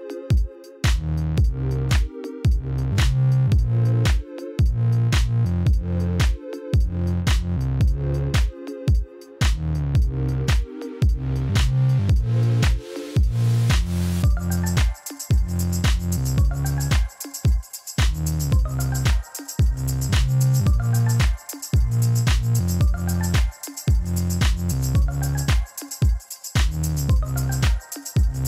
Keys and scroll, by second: 13.0 Tab, 15.1 3, 15.9 Return.